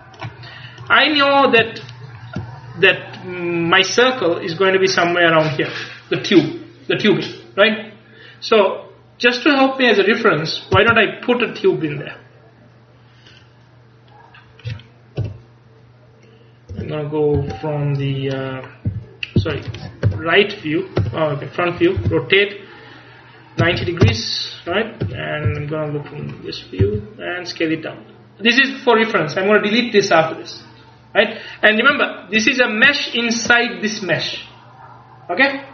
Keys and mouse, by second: 0.3-2.5 drag, 9.4-10.8 drag, 10.8 space, 14.2 click, 15.3 KP_3, 16.8 Tab, 17.4 Tab, 19.0-22.1 typing, 25.1 KP_1, 25.6 KP_3, 26.9 s.